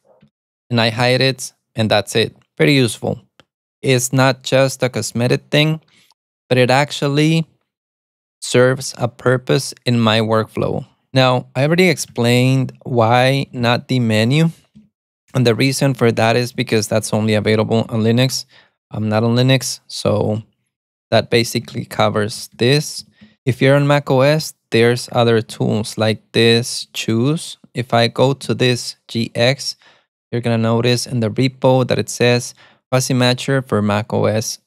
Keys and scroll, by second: 0.4 alt+super+a, 11.6-18.8 typing, 21.7 alt+x, 22.0-23.8 typing, 25.1-29.0 typing.